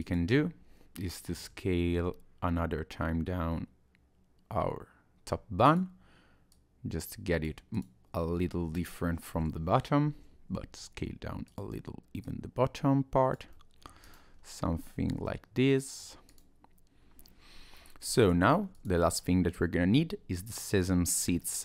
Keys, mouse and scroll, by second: 0.0 click, 1.4 s, 6.5 click, 7.7 click, 10.1 s, 12.2 click, 13.5 middle click, 14.0 click, 14.3-14.8 scroll down 1, 14.8-15.6 scroll up 3, 15.7 middle click, 16.3 click, 18.1 middle click, 18.7 click, 19.1-19.7 scroll down 1, 19.7 middle click, 21.4 middle click.